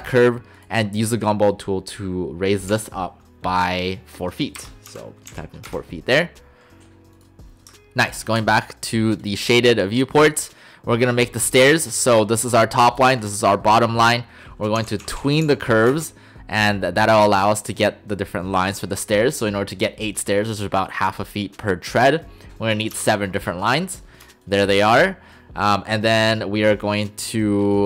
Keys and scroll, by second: 2.7 6, 4.6 BackSpace, 5.7 Return, 14.8-15.5 typing, 15.9 Return, 23.0 Return.